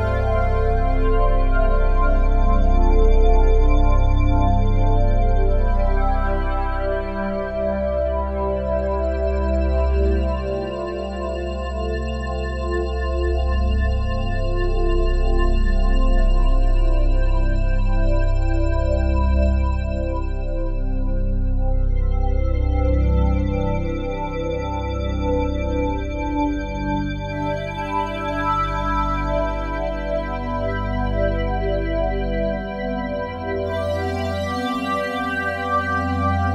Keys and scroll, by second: 4.0 ctrl+z, 12.8 F3, 14.8 F3, 24.6 ctrl+z.